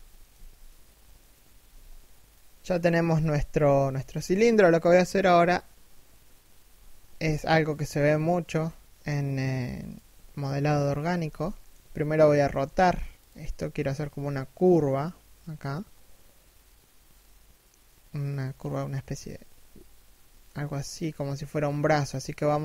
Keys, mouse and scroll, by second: 1.1 a, 1.8 middle click, 2.6 1, 7.1 a, 9.4 alt+right click, 10.2 alt+shift+middle click, 11.9 r.